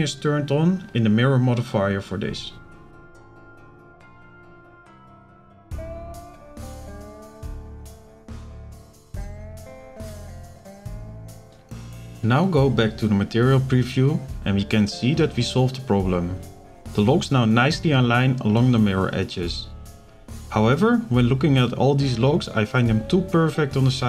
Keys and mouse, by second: 1.9 click, 4.2 click, 5.1 shift+middle click, 5.9 shift+middle click, 6.8 click, 7.5 b, 10.0-11.5 drag, 11.7 click, 12.4 click, 12.8 z, 14.0 z, 15.1 shift+click, 15.9 shift+click, 18.0 middle click, 21.9 click, 23.2 shift+middle click.